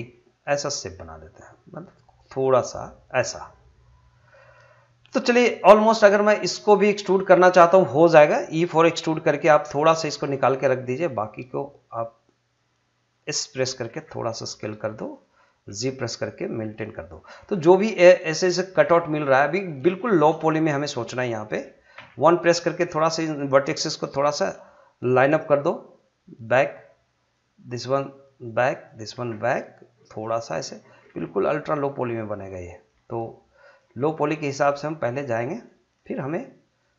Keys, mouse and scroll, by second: 3.0 click, 6.8 click, 9.1 e, 12.2 click, 13.9 s, 14.9 click, 15.7 g, 16.9 click, 17.8 scroll up 1, 18.8 shift+middle click, 20.4 shift+middle click, 21.9 1, 23.0 click, 25.3 g, 26.4 click, 27.8 g, 28.4 click, 29.1 g, 30.0 click, 31.0 g, 32.1 click, 32.9 g, 33.6 click, 34.8 g, 35.6 click.